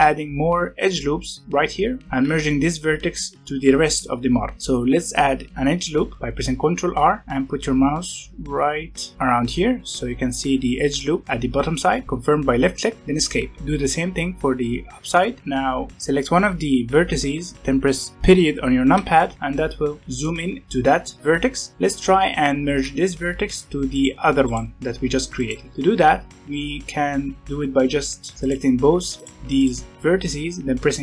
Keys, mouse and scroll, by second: 2.0 g, 4.4 g, 6.0 ctrl+r, 13.5 ctrl+r, 15.4-15.9 scroll up 1, 15.9 click, 18.9 KP_Decimal, 19.3 scroll up 2, 20.0-21.7 middle drag, 21.7 g, 22.7 g, 23.9 click, 24.4 click, 25.3 click, 28.3 shift+click, 29.5 shift+click, 30.8 m.